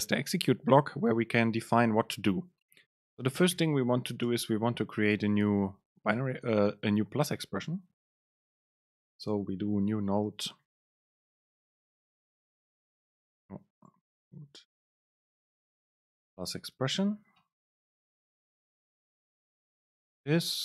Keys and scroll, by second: 4.4 super+space, 15.7 super+space, 16.2 Right, 16.6 super+space, 19.9 Return, 20.4 Up.